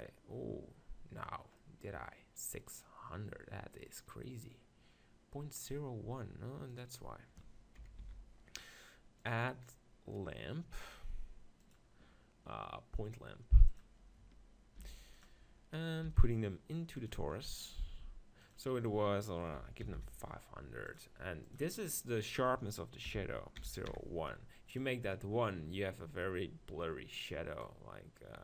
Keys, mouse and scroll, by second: 1.3-2.7 middle drag, 2.7-4.5 right drag, 6.7-8.4 drag, 7.8 KP_7, 8.0 z, 14.8 g, 15.4-17.1 middle drag, 16.1 g, 17.1-20.9 drag, 20.9 0, 25.8-28.4 middle drag, 27.6-28.4 drag.